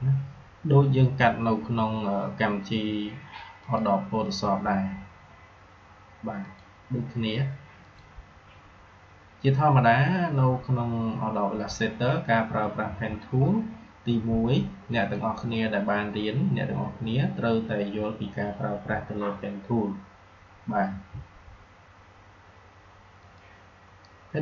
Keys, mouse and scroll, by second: 3.6 click, 6.4 click, 23.2 click.